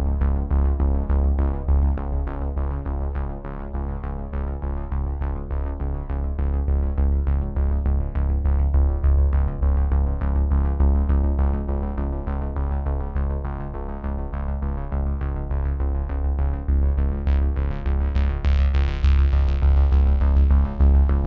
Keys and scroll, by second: 0.1 F9.